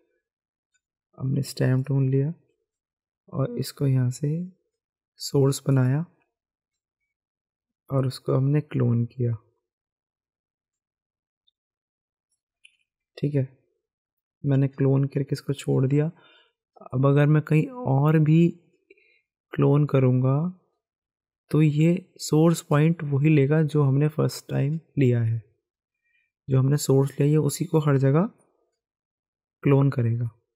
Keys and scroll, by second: 12.6 ctrl+z.